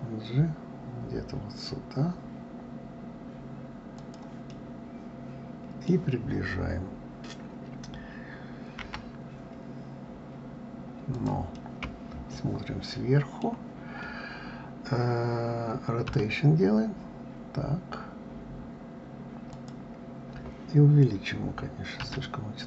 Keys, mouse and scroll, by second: 4.5-7.5 middle drag, 11.5-14.5 middle drag, 16.1 r.